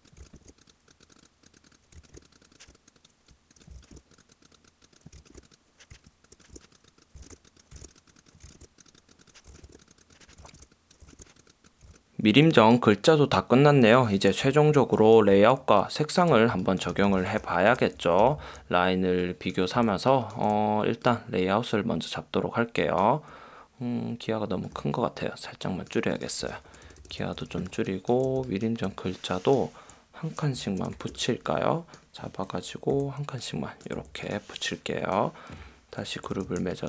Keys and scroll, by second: 0.0-0.4 typing, 1.9 v, 2.7 a, 3.7 v, 4.9-11.9 typing, 14.7 super+0, 15.4 space, 16.6 space, 17.0 v, 17.8 super+;, 18.3 v, 19.9 space, 26.8 super+-, 27.6 space, 28.5 space, 30.9 shift+super+g, 33.1 Left, 34.2 Left, 36.3 super+g, 36.6 space.